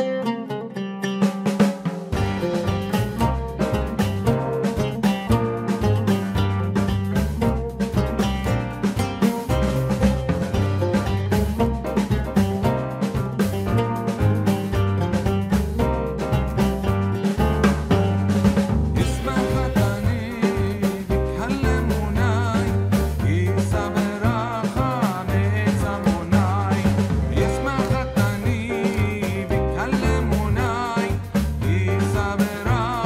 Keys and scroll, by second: 28.1 ctrl+z.